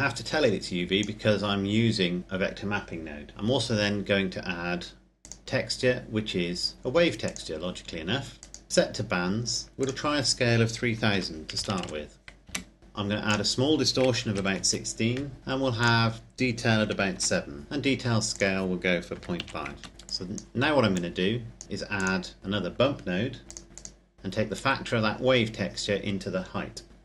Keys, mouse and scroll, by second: 5.3 click, 7.6 click, 8.7-9.2 scroll down 1, 9.9 click, 11.1 KP_3, 11.7 KP_0, 12.7 KP_Enter, 13.3 click, 14.2 KP_1, 14.8 KP_Enter, 15.7 click, 16.7 KP_7, 17.2 KP_Enter, 18.3 click, 19.3 KP_5, 19.8 KP_Enter, 19.9 click, 23.7 click.